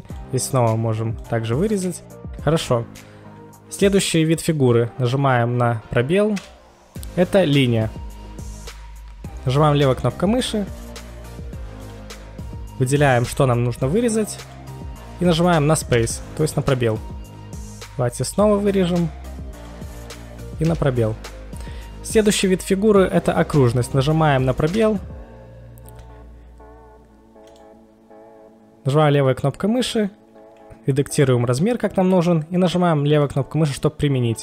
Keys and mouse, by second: 0.1 drag, 0.1 KP_1, 1.2 click, 6.3 space, 9.9 click, 11.7 click, 13.3 click, 14.4 click, 16.0 space, 17.9 space, 18.3 click, 19.5 click, 20.6 space, 23.3 space, 24.8 space, 27.5 click, 27.5 space, 33.1 click.